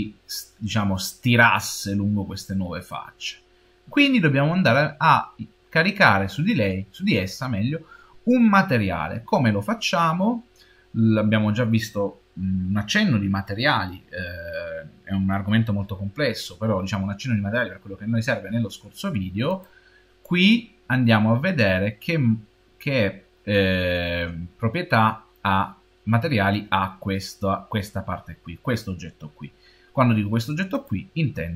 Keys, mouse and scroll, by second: 21.1 click, 30.6 click.